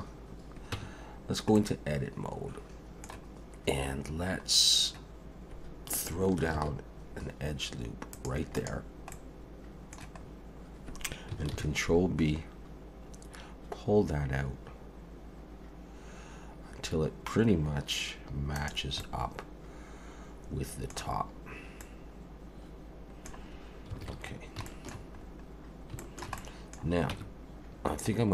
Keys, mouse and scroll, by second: 0.7 Tab, 1.5 middle click, 3.6 scroll up 1, 4.3 scroll up 1, 4.5 scroll down 1, 6.5 ctrl+r, 9.1 middle click, 10.2-11.3 scroll up 2, 11.5 ctrl+b, 19.0 middle click, 21.5 scroll up 1, 21.8 middle click, 24.0 alt+a, 24.3 scroll down 2, 24.7 shift+middle click, 25.2-25.5 scroll up 3, 26.0 shift+middle click, 26.4 middle click, 27.1 Tab.